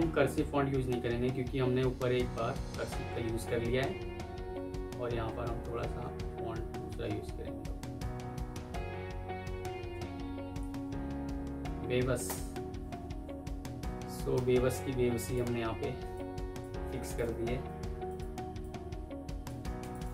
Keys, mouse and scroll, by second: 1.1 Down, 1.4 Down, 1.9-3.8 Down, 4.0 Down, 5.0 Down, 5.2 Down, 6.0-7.2 Down, 7.6 Down, 8.1 Down, 8.4 Down, 8.7 Down, 9.8 Up, 12.2 Return, 16.9 shift+click, 17.5 Escape, 19.8 shift+click.